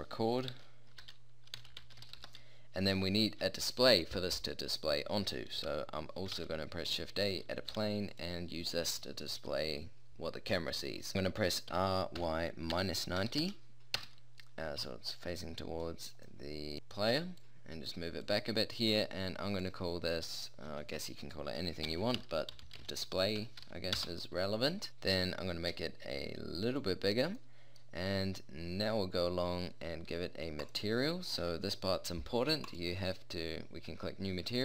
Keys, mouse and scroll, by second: 6.4 shift+a, 7.8 g, 11.8 r, 15.7-16.3 middle drag, 21.6-24.9 middle drag, 25.8 s, 26.8 click, 27.1 middle drag, 32.5 middle click, 34.5 middle click.